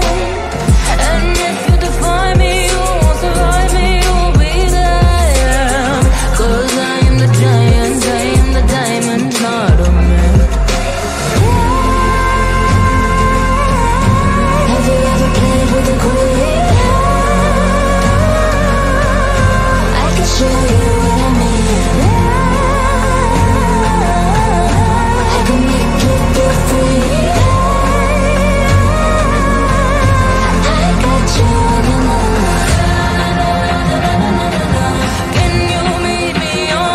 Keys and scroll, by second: 4.0 F3, 5.5 Escape, 8.4 Right, 12.3 F3, 16.2 ctrl+q, 21.2 Delete, 28.4 c, 28.9 shift+Page_Down, 30.7 c, 33.1 shift+F2.